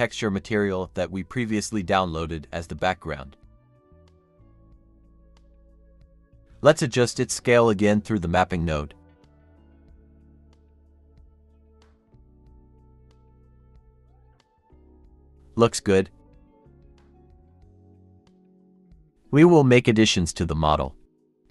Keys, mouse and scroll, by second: 0.6 middle click, 2.9 double click, 6.9 scroll up 1, 8.9 typing, 9.7 Return, 10.2 scroll up 1, 10.6-11.5 typing, 10.7 Return, 11.6 Return, 12.8 Return, 13.4 typing, 13.5 Return, 14.0 Return.